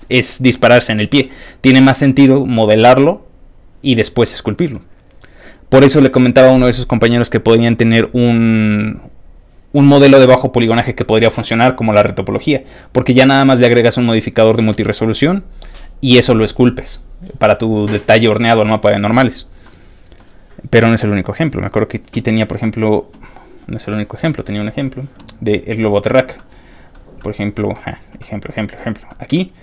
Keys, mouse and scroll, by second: 1.2 middle click, 4.2 middle click, 19.6 middle click, 21.0 click, 21.7-22.1 scroll down 3, 22.7 middle click, 23.1 middle click, 23.5 middle click, 23.6 scroll up 1, 25.9 click, 26.3 middle click, 27.2 middle click, 28.2 middle click, 29.1 middle click.